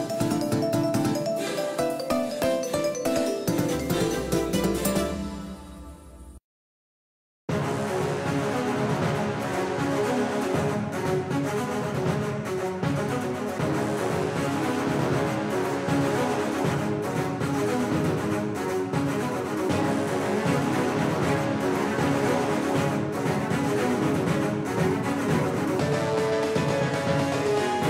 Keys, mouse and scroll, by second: 7.0-10.3 middle drag, 12.8 KP_1, 13.4 KP_3, 13.9 KP_1, 15.2-16.4 middle drag, 20.2-22.9 drag, 22.9 KP_3, 24.7 middle click, 27.3-27.8 middle drag.